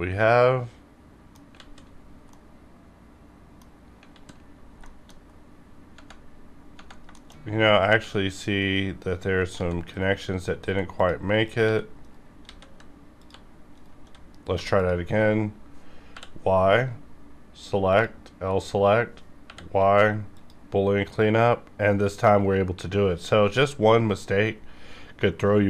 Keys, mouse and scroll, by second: 1.5 alt+z, 1.9 scroll down 1, 2.3-4.0 middle drag, 4.0 alt+z, 4.8 shift+middle click, 5.2 scroll up 1, 7.1 middle click, 7.2 shift+middle click, 7.3-7.7 shift+scroll up 2, 7.7 click, 8.0 g, 8.6 right click, 9.5 g, 9.9 right click, 10.6 x, 10.9 click, 11.6 g, 12.0 right click, 12.4 a, 13.1 click, 13.2 g, 13.7 right click, 14.5 2, 14.7 click, 16.0 y, 17.8 click, 17.9 click, 18.3-19.0 scroll down 2, 19.0-19.4 scroll up 2, 19.4 y, 20.3 click, 23.2 click, 23.4-24.8 scroll up 1.